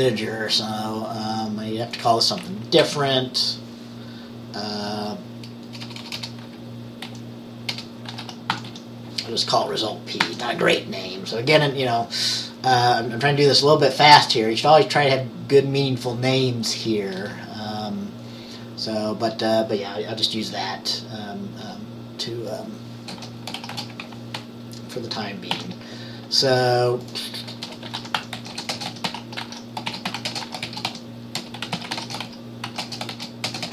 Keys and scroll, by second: 2.9 Right, 5.9-9.2 typing, 10.3 ctrl+s, 23.6 <, 23.8 <, 25.6 ctrl+s, 25.6 typing, 27.7-33.7 typing.